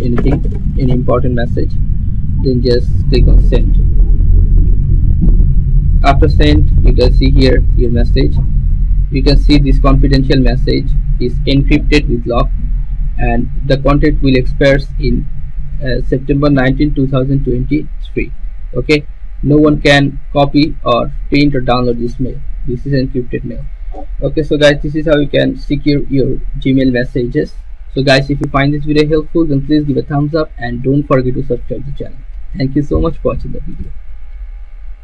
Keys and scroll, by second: 0.0-1.5 typing.